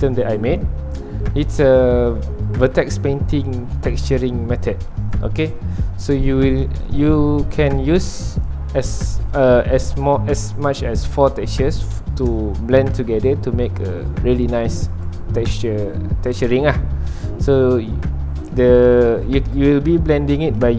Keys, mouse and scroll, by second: 2.6 /, 3.7-5.0 middle drag, 5.0 scroll down 1, 5.1 middle click, 5.5 scroll up 2, 5.8-20.7 middle drag.